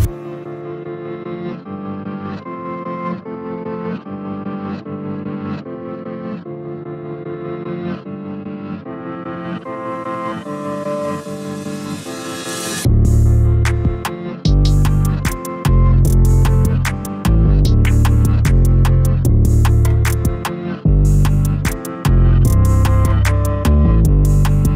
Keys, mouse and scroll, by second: 0.0-4.3 middle drag, 7.1 click, 8.0 ctrl+click, 8.6 ctrl+click, 9.4 ctrl+click, 10.2 ctrl+click, 10.9-13.9 middle drag, 14.2 shift+click, 15.1 shift+click, 15.7 shift+click, 16.7 ctrl+click, 17.2-18.2 middle drag, 18.2 shift+click, 18.6-20.2 middle drag, 20.2 ctrl+click, 21.1 ctrl+click, 21.5-24.0 middle drag, 24.0 ctrl+click, 24.6-24.7 middle drag.